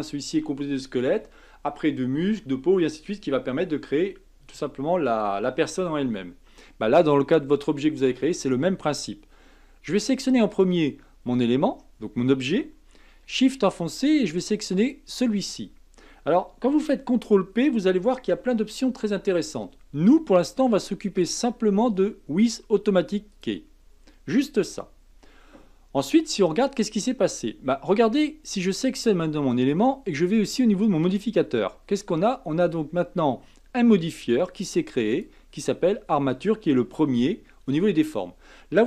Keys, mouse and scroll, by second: 10.5 click, 14.8 shift+click, 18.3 ctrl+p, 28.7 click, 35.1-38.1 drag.